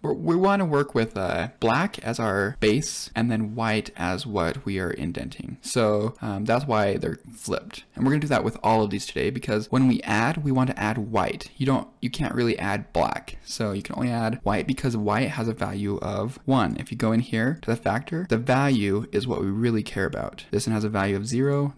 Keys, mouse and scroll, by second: 5.6 click, 16.5 click, 17.4 click, 20.5 click.